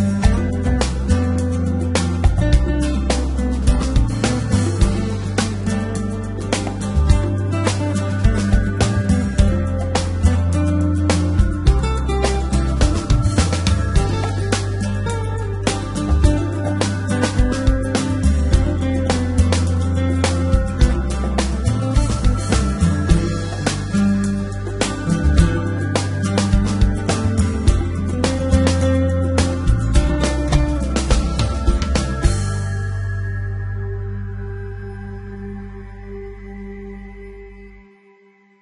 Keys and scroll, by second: 0.4 x, 2.6 Tab, 6.6 Tab, 10.9 g, 11.6 y, 16.8 g, 17.4 z, 18.4 g, 18.6 x, 19.2 y, 29.4 x.